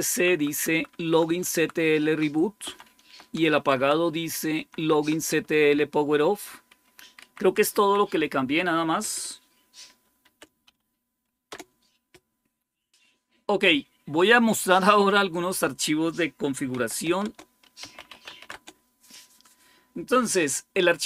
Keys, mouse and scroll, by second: 0.0 Right, 0.2 Right, 0.4 Right, 0.6 Right, 0.8 Right, 1.1 Right, 1.3 Right, 1.9 Right, 2.5 Left, 2.7 Left, 2.9 Left, 3.2 Down, 3.4 Down, 3.6 Down, 4.4 Left, 4.7 Left, 4.9 Left, 5.5 Right, 6.1 Right, 6.2 Right, 6.5 Right, 6.9 Up, 7.1 Up, 7.3 Up, 7.5 Up, 10.1-10.5 typing, 11.4 Return, 15.2 click, 16.6-18.8 typing, 17.1 Return.